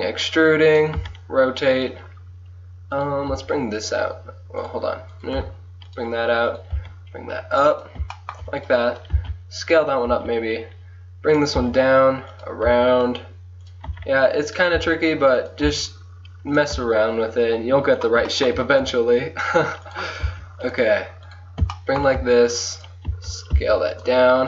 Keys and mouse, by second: 1.2 r, 3.0 click, 3.4 g, 5.4 g, 6.8 g, 9.3 s, 10.2 e, 11.7 r, 12.7 g, 13.9 r, 14.9 g, 15.7 e, 16.8 r, 18.9 g, 20.3 s, 21.3 click, 23.6 s.